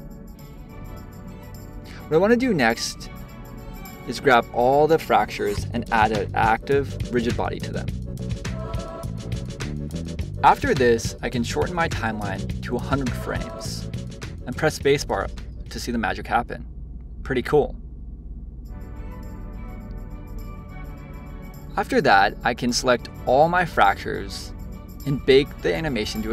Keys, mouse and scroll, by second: 1.6 click, 3.7-6.8 drag, 8.6 scroll down 2, 8.9-10.0 shift+middle drag, 10.0 click, 11.0-12.5 middle drag, 12.5 click, 13.4 0, 14.4 click, 14.7 middle click, 15.0 space, 19.6 space, 20.1 shift+Left, 21.0 click, 22.5-25.7 drag.